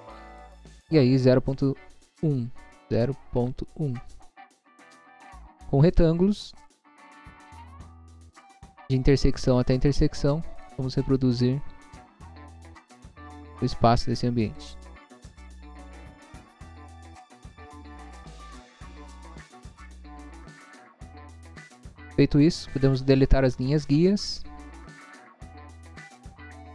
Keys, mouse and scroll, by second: 0.3 click, 2.6 0, 3.4 ., 3.9 1, 4.6 Return, 6.9 click, 8.7 click, 10.0 click, 10.6 click, 12.5 click, 13.5 click, 14.5 click, 15.3 click, 16.4 click, 17.1 scroll up 1, 18.2 click, 19.4 click, 20.1 click, 21.2 click, 21.7 scroll down 1.